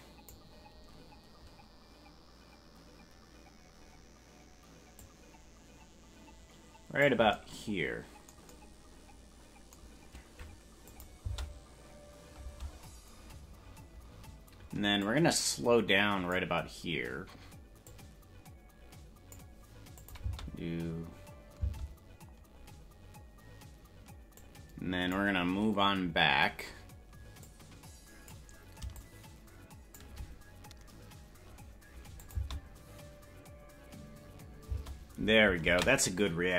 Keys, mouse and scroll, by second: 4.9-7.1 drag, 10.9 click, 11.2 space, 12.6 space, 15.1-16.4 drag, 15.1 space, 17.8-19.4 drag, 20.0 click, 20.4 space, 24.4 click, 27.4 click, 28.9-30.0 shift+drag, 32.2 click, 32.5 space.